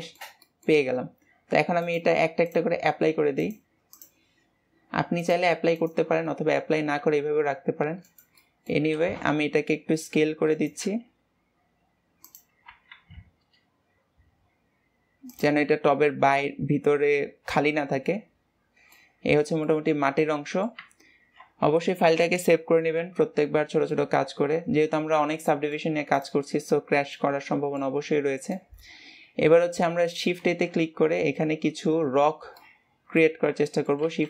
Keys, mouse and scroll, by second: 1.7-6.2 drag, 6.2-6.9 middle drag, 6.9 s, 8.3 middle click, 8.7 s, 15.6-18.6 middle drag, 19.2-19.6 scroll down 2, 19.6-21.1 middle drag, 21.1 ctrl+s, 23.8-25.1 middle drag, 25.1-25.4 scroll down 2, 25.4-26.1 middle drag, 26.1 click, 26.6-27.1 scroll up 1, 27.1 middle click, 28.0-28.4 scroll up 1, 28.4-30.3 middle drag, 30.3 shift+a, 32.5-33.3 middle drag, 33.3 scroll down 1, 33.6 middle click, 34.0 shift+a.